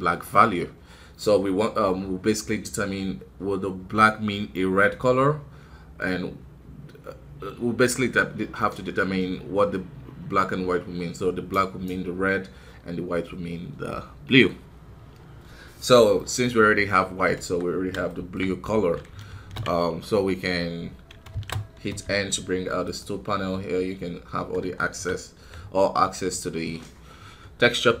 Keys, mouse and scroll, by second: 17.1 scroll up 1, 17.3 KP_1, 18.0-19.2 shift+middle drag, 21.3 ctrl+space, 21.5 scroll down 1, 21.8 n, 24.7-28.0 shift+middle drag.